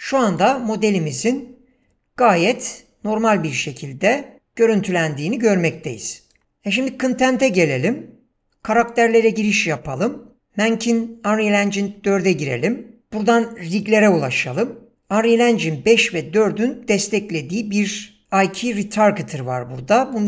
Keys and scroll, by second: 6.4 ctrl+space.